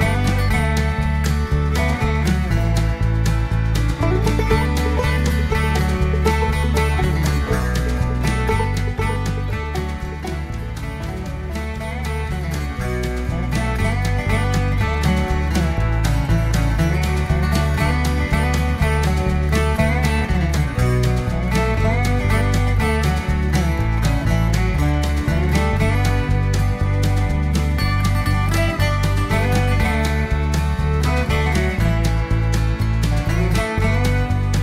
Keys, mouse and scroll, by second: 0.9 click, 2.6 click, 4.4 click, 5.4-5.7 scroll down 1, 6.0-7.2 drag, 7.3-7.9 scroll down 1, 8.0-8.8 scroll up 2, 14.1 click, 15.2 click, 16.6 click, 19.0 click, 20.6 click, 21.8 click, 23.5 click, 23.9-24.2 scroll down 1, 24.4-25.6 middle drag, 25.7-26.2 scroll down 2, 26.2 scroll up 2, 27.7 click, 28.5 click, 30.1 click, 32.1 click, 33.5 click.